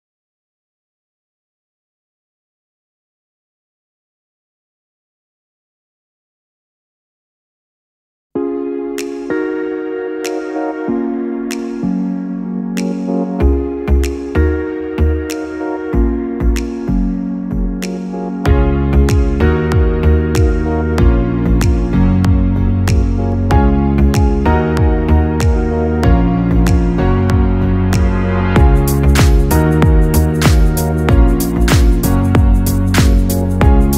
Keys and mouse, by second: 1.9-5.5 middle drag, 5.5 r, 9.7 KP_7, 10.9 KP_1, 12.6-13.7 ctrl+middle drag, 13.7 KP_3, 15.5 g, 19.9 g, 24.5-26.0 middle drag, 26.0-26.6 ctrl+KP_8, 27.3 ctrl+KP_6, 27.9-30.1 middle drag, 30.1 g, 32.8 s.